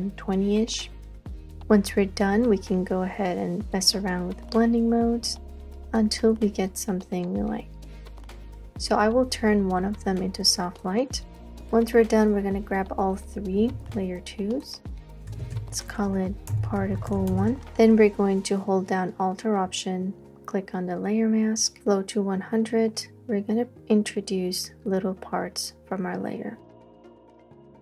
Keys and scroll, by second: 13.7 super+g, 15.1-18.1 typing, 27.7 space.